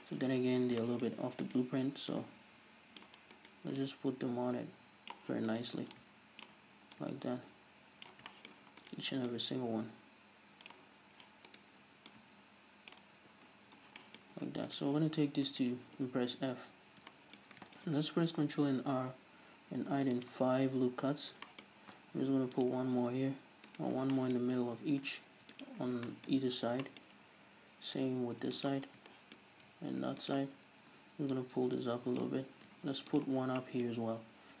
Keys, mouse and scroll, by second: 0.8-1.5 shift+middle drag, 1.1-1.5 scroll up 2, 1.5 right click, 2.1-3.4 drag, 3.4 right click, 3.9-5.5 drag, 5.5 right click, 6.0-8.3 drag, 8.3 shift+middle click, 8.8 right click, 9.3-11.5 drag, 11.5 right click, 12.1-14.0 drag, 13.2 Tab, 13.5-14.0 scroll down 2, 14.0-14.7 shift+middle drag, 14.4 Tab, 14.7-15.6 right drag, 16.5 f, 16.7 middle click, 16.7 scroll up 2, 17.1-20.3 shift+middle drag, 17.9 ctrl+r, 20.3 click, 21.2-21.8 scroll up 2, 21.5-22.7 shift+middle drag, 22.3 ctrl+r, 22.7 click, 23.0 g, 24.0 scroll down 2, 24.2-25.8 shift+middle drag, 24.9 scroll down 1, 25.3 ctrl+r, 25.8 scroll down 1, 25.9-28.7 shift+middle drag, 26.4 scroll up 1, 27.8-28.3 scroll up 1, 28.3 ctrl+r, 28.7 click, 28.9 scroll down 1, 29.1-30.4 shift+middle drag, 29.9 ctrl+r, 30.4 click, 30.5-31.4 scroll up 1, 31.4-33.2 drag, 32.9 ctrl+r, 33.5 scroll down 1, 33.6-34.6 shift+middle drag, 34.3 scroll down 1.